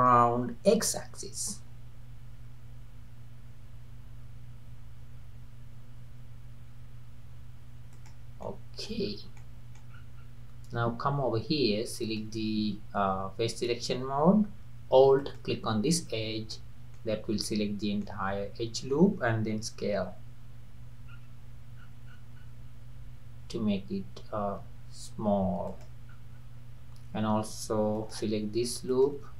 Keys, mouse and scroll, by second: 8.5 middle click, 9.0 scroll up 2, 9.4 middle click, 9.9 scroll up 3, 10.6-11.1 scroll up 2, 12.0 click, 15.2 alt+click, 16.1-16.5 scroll down 2, 16.5 middle click, 17.1-17.5 scroll down 2, 17.5-19.9 middle drag, 19.9 s, 26.1-27.2 scroll up 4, 28.0 alt+click, 28.9 alt+click.